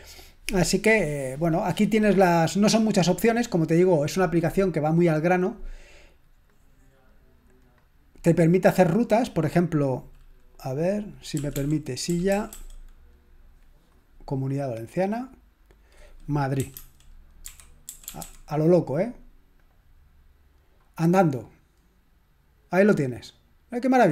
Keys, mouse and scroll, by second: 6.5 click, 7.6 click, 11.3-13.0 typing, 15.0 click, 16.3-18.7 typing, 19.6 click.